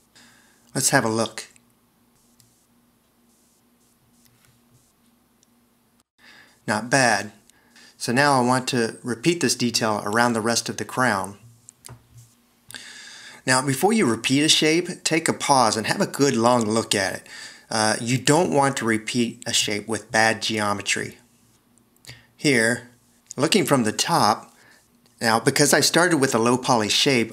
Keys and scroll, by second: 6.1 0, 26.0 1.